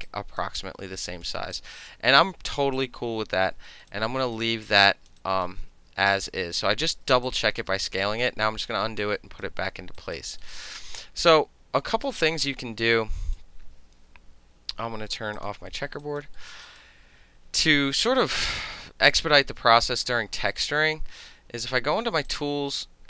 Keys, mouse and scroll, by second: 0.1-0.4 alt+right drag, 0.4 alt+middle drag, 0.6-1.3 alt+drag, 1.3 alt+middle drag, 1.5-1.9 alt+drag, 1.9-2.8 alt+middle drag, 2.8 alt+click, 3.7 alt+middle drag, 3.9-4.4 alt+right drag, 4.7-5.1 alt+drag, 5.2 alt+right drag, 5.7 ctrl+z, 6.4 ctrl+z, 7.3-7.6 alt+drag, 7.9 ctrl+z, 8.2 ctrl+z, 9.0 alt+right click, 10.0 alt+right click, 10.3 alt+middle click, 10.5 alt+right click, 12.1 space, 13.0 alt+right click, 15.4 click, 16.0 alt+right click, 16.7 alt+right click, 22.3 click.